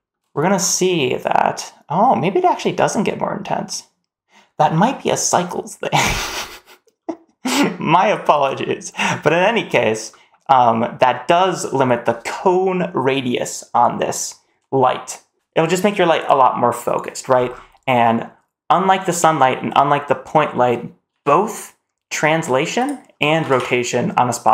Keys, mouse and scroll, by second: 1.0 click, 6.4-8.0 drag, 8.5 shift+middle click, 9.2 shift+middle drag, 9.9 middle click, 10.4 scroll down 1, 10.7 middle drag, 10.9-11.3 scroll down 1, 11.3 middle drag, 11.5-14.4 scroll down 2, 11.5 middle click, 17.3-17.9 scroll down 2, 17.7 middle click, 19.5-20.9 scroll down 1, 20.9 g, 23.2 r.